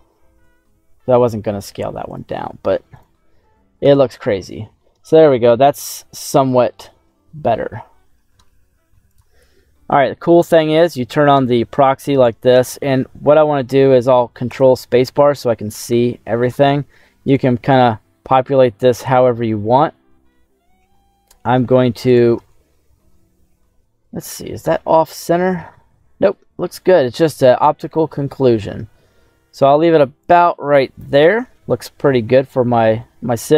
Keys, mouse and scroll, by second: 0.4 s, 2.0 click, 2.3 ctrl+a, 3.7 /, 4.3 middle click, 5.0 scroll up 2, 5.5-7.9 middle drag, 9.6 middle click, 11.5 middle click, 12.0 scroll down 2, 14.5 ctrl+space, 15.0 scroll down 2, 15.3 middle click, 16.5 scroll down 2, 16.7 middle click, 17.2 right click, 18.1 g, 22.0 right click, 22.3-24.6 middle drag, 24.6 KP_7, 26.0 KP_7, 26.5-27.5 middle drag, 27.5 right click, 28.0 g, 28.5 z, 30.2 click, 30.4 middle click, 31.6 scroll up 3, 32.4 scroll down 1, 32.7 middle click.